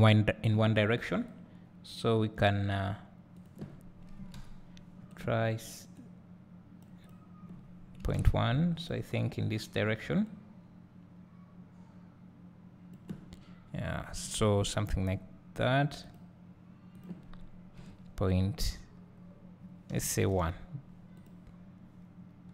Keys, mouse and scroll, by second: 1.4-5.1 drag, 6.1-8.8 drag, 10.5-16.1 drag, 13.6 `, 21.1 click.